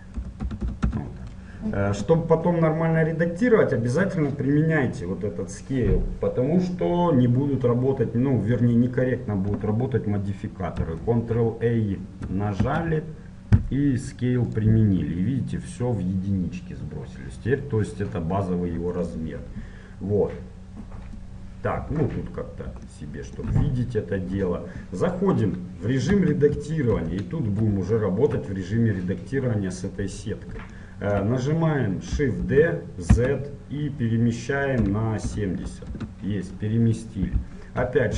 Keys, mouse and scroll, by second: 14.7 ctrl+a, 18.3-21.4 middle drag, 21.4-26.2 drag, 26.2 Tab, 27.1 KP_1, 28.1 middle click, 32.5 shift+d.